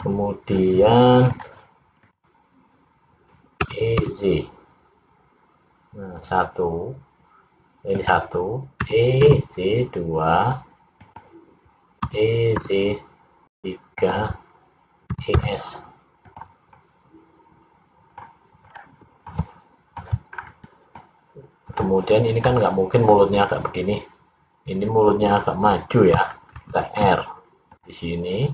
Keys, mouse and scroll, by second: 0.0 click, 1.4 click, 2.2 click, 3.8 e, 9.0 e, 12.2 e, 16.8 middle click, 18.8 scroll down 2, 19.4 middle click, 20.4 scroll up 2, 21.0 middle click, 26.6 ctrl+r.